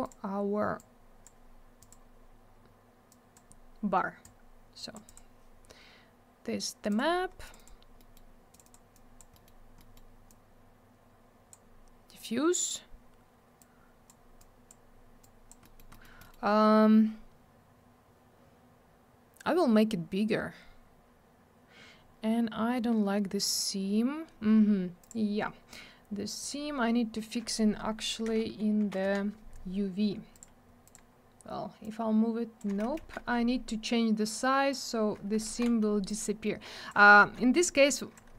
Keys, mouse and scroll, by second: 5.1 click, 6.9 click, 6.9 click, 7.4 click, 7.5 click, 7.5 click, 7.6 double click, 7.9 middle click, 8.1 middle click, 8.5 click, 8.5 double click, 8.6 click, 8.7 click, 8.9 click, 9.3 scroll up 1, 9.4 middle click, 9.7 middle click, 9.9 double middle click, 10.2 click, 13.6 click, 14.4 click, 15.2 click, 15.6 middle click, 15.7 middle click, 15.9 middle click, 16.0 double middle click, 16.2 middle click, 16.3 middle click, 25.0 click, 25.1 click, 26.4 click, 26.4 click, 28.2 F3, 28.8 F3, 29.0 F4, 30.3 click, 30.4 click, 30.8 click, 30.9 click, 31.8 click, 33.0 ctrl+z, 34.2 click, 35.4 ctrl+z, 36.1 click, 37.2 ctrl+z, 37.6 click.